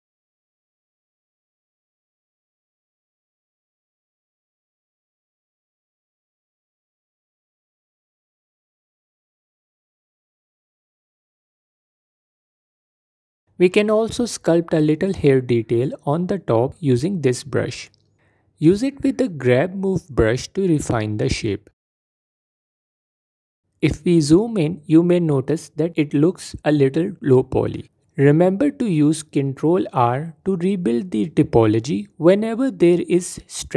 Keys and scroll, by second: 1.1 f, 14.9 f, 17.4 f, 19.3 g, 19.5 f, 22.8 f, 25.1 F4, 28.6 ctrl+r, 30.3 F4, 31.0 f, 32.3 f.